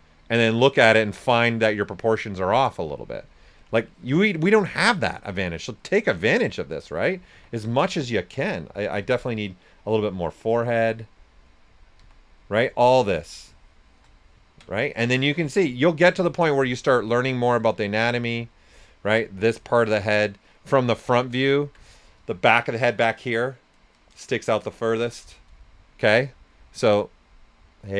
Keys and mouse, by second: 2.2 right click, 4.3 right click, 5.6 click, 7.3 s, 7.4 click, 8.9 s, 9.0 click, 11.9 s, 12.0 click, 13.0 shift+click, 14.6 alt+right click, 15.6 click, 16.3 right click, 16.3 typing, 17.6 click, 20.5 right click, 27.2 click.